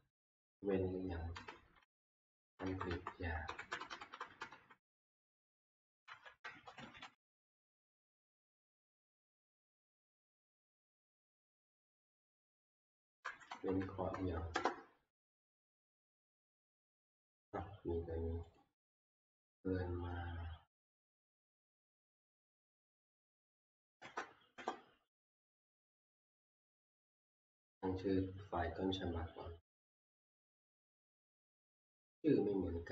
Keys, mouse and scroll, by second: 3.9 BackSpace, 4.1 BackSpace, 4.3 BackSpace, 4.5 BackSpace, 6.2-7.5 typing, 7.7 Left, 12.0-15.6 drag, 13.5 Right, 13.9 Left, 14.5 Return, 18.6 Return, 18.6 click, 22.8 click, 23.6 BackSpace, 24.6 Return, 31.5 click.